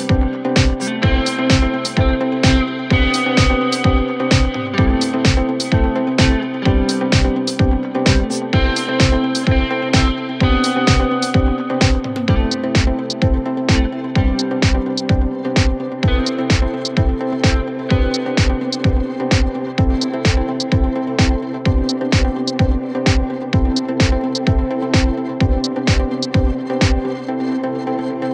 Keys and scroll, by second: 0.1 ], 4.7 ], 7.6 ], 8.3 ], 8.9 ], 11.7 ], 14.4 ctrl+z, 16.2 ctrl+z, 17.0 ctrl+z, 18.5 ctrl+z, 20.8 ], 24.7 ctrl+z, 26.6 ctrl+z.